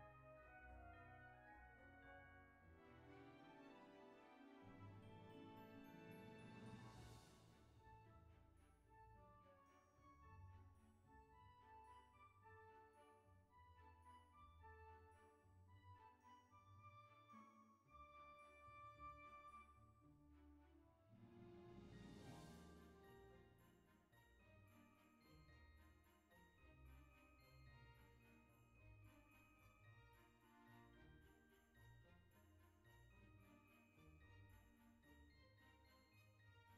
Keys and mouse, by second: 0.2 KP_3, 1.1 g, 2.4 click, 6.7 click, 7.7 middle click, 9.7 Tab, 10.0 click, 11.1 KP_3, 12.1 click, 13.0 KP_1, 13.6 click, 14.2 shift+middle click, 15.7 shift+middle click, 16.8 F6, 17.8 click, 19.9 click, 21.4 click, 22.4 Right, 22.7 KP_0, 23.7 BackSpace, 25.1 KP_0, 25.4 KP_Decimal, 25.7 KP_0, 28.0 click, 29.7 click, 30.5 shift+middle click, 32.5 click.